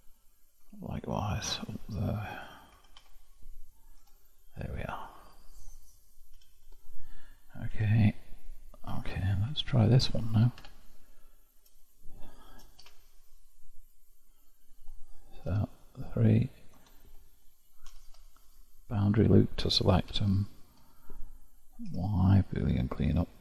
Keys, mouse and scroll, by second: 2.3 alt+click, 2.7 q, 4.0 Tab, 4.9-6.3 scroll down 1, 6.3 scroll down 3, 6.3 alt+h, 7.8 KP_Divide, 8.4 click, 9.5 KP_Divide, 10.6 Tab, 11.8-12.3 scroll up 1, 12.3-12.8 shift+scroll down 1, 12.8 1, 13.7-15.5 middle drag, 15.5 3, 15.7-16.8 drag, 16.8 ctrl+KP_Add, 17.9 shift+', 18.9-20.1 middle drag, 20.1 1, 20.8-21.9 scroll up 1, 21.9 y.